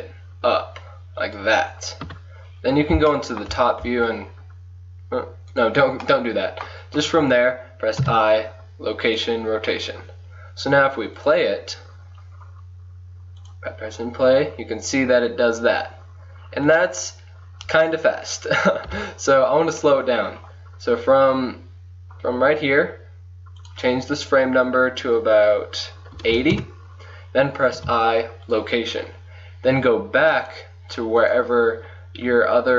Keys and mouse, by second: 2.1 KP_7, 2.7 middle click, 3.9 r, 8.0 i, 11.2-12.6 drag, 12.8-16.4 drag, 16.7-18.9 drag, 18.9 KP_1, 19.8-22.1 drag, 22.1 middle click, 25.6-30.5 middle drag, 27.8 i, 30.5 click.